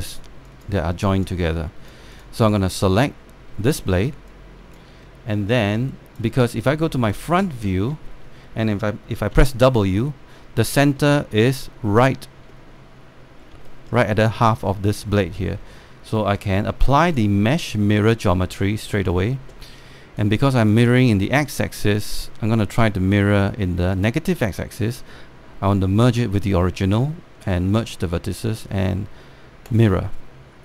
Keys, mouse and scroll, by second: 1.2 alt+click, 1.7 scroll down 1, 1.9 click, 2.8 alt+click, 4.2 alt+scroll up 2, 4.6 alt+middle click, 6.6 alt+click, 7.1 space, 8.2-8.5 scroll up 1, 8.7 alt+scroll down 1, 9.0 scroll up 1, 10.0 w, 10.8 alt+middle click, 11.4-13.1 scroll up 3, 14.0 scroll down 1, 14.4 alt+middle click, 16.1 alt+middle click, 17.7-19.6 drag, 24.6 click, 30.3 click.